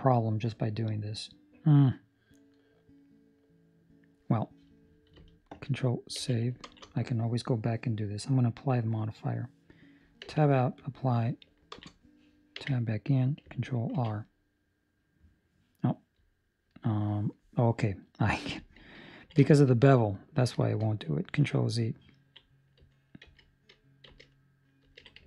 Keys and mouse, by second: 5.7 Escape, 6.1 ctrl+s, 6.6 ctrl+space, 10.2 Tab, 10.2 click, 10.7 click, 11.7 ctrl+space, 12.5 Tab, 13.9 ctrl+r, 19.1 ctrl+middle click, 19.5 shift+middle click, 19.9 middle click, 20.5 shift+middle click, 20.8 middle click, 22.2 ctrl+middle click, 23.4 ctrl+z, 24.2 ctrl+z, 25.0 ctrl+z.